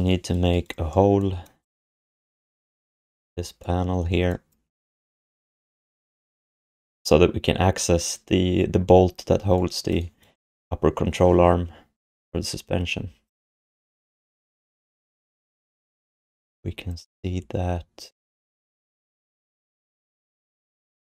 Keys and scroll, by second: 3.1 f.